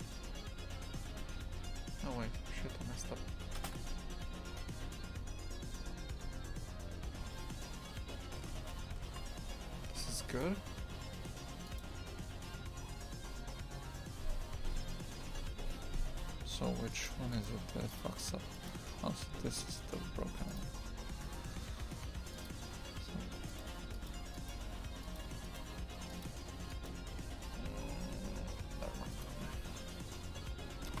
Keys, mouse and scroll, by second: 3.9 ctrl+z, 4.2-5.9 ctrl+z, 8.7 ctrl+shift+z, 9.8 Tab, 11.8-31.0 drag.